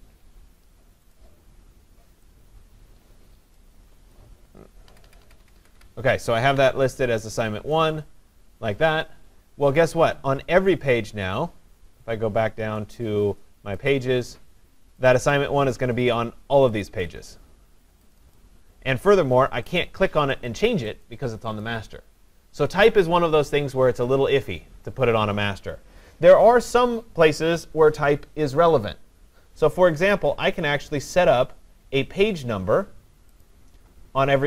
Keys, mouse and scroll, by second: 1.1 click, 4.9 Down, 5.0 Down, 5.2 Down, 5.4 Down, 5.6 Down, 5.8 Down, 7.8 Up, 7.8 click, 9.5 scroll down 6, 11.5-13.0 drag, 13.9-15.1 drag, 16.8 click, 17.1 click, 18.2 click, 18.4 click, 19.8 click, 20.5 click, 21.6 click, 33.4 click.